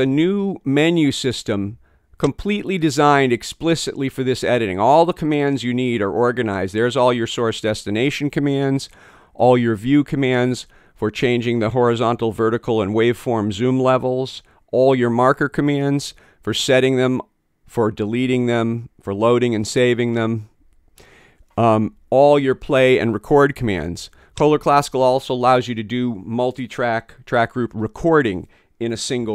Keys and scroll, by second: 29.2 ↺.